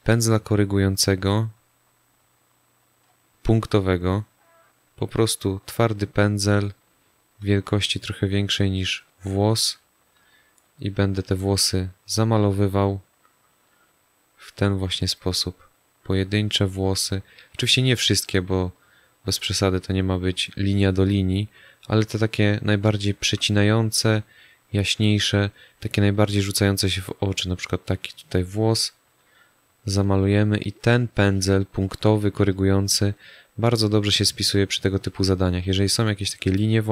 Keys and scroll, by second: 22.8 space, 24.8 space, 33.9 space.